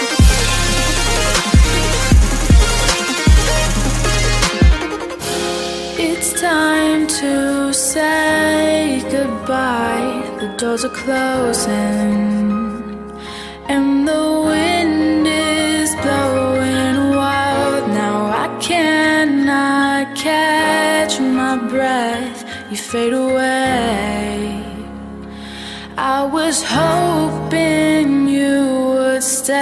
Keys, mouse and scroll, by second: 1.9 right click, 2.5 F10, 2.6 right click, 3.9 click, 6.7-8.2 typing, 9.4 typing, 11.6-12.8 typing, 13.1 Down, 13.3 Down, 13.7 Return, 14.6-16.9 drag, 17.2 F10, 17.5 right click, 18.4 click, 19.8-21.0 typing, 21.1 Return, 22.0 click, 28.3 F10.